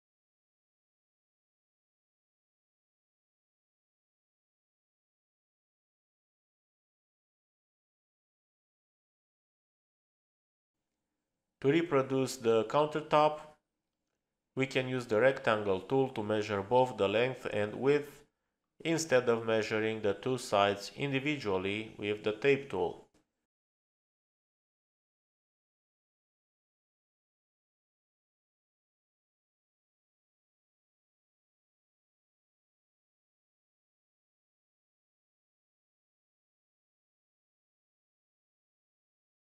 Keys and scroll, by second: 0.1 space.